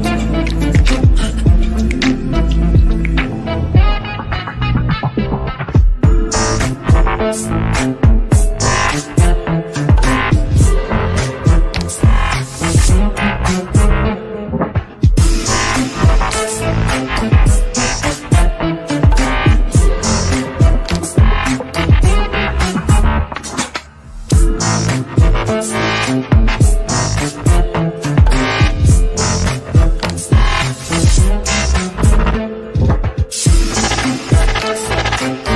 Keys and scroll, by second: 1.5 Delete, 4.9 Up, 5.3 Right, 12.6 Delete, 14.9 Delete, 15.6 KP_Add, 18.2-19.2 typing.